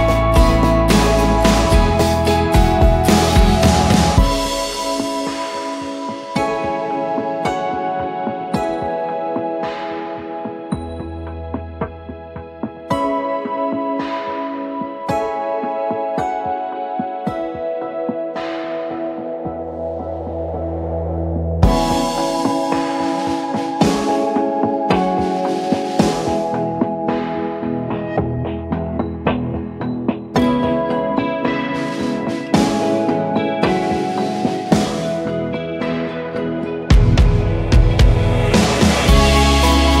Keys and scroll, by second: 2.1 Right, 2.2 Right, 2.3 Right, 2.4 Right, 2.5 Right, 3.2 s, 3.5 Return, 8.9-9.9 typing, 10.8 ctrl+a, 10.9-13.2 typing, 14.3-15.1 typing, 16.5 Down, 16.6 Down, 16.7 Down, 16.8 Down, 18.5 ctrl+=, 18.7 ctrl+=, 20.2 Down, 20.4 Down, 24.2 Down, 24.4 Down, 24.5 Down, 24.6 Left, 24.7 Left, 26.8 ctrl+g, 27.6-28.8 typing, 28.9 ctrl+a, 29.9 ctrl+d, 39.7-40.0 typing.